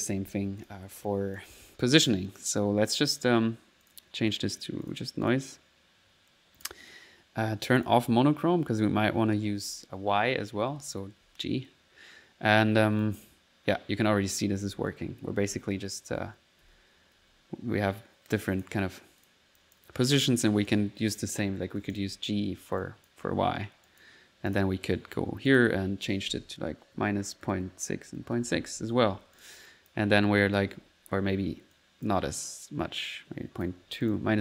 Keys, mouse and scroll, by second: 0.6 click, 1.0 click, 1.8 1, 2.6 1, 3.8 click, 4.3-5.7 drag, 6.6 click, 7.7 click, 8.8 typing, 10.2-11.2 typing, 13.0 click, 14.0-17.6 typing, 18.4 click, 19.2 click, 19.6 click, 20.7 click, 22.1-23.2 typing, 22.8 click, 23.8 click, 24.5 click, 24.5 typing, 25.4 click, 29.3 click, 30.4 click, 30.7 1, 31.7 click, 32.5-33.7 drag, 34.1 click.